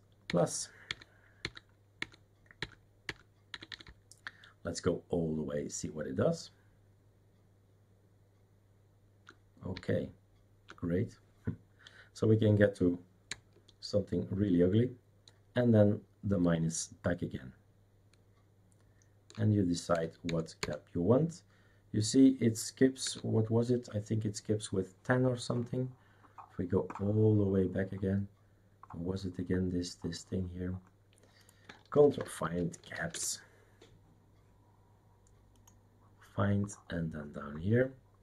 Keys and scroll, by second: 0.3 +, 3.5 +, 6.9 +, 13.2-20.6 typing, 23.0 space, 32.1 ctrl+f, 32.2-33.4 typing.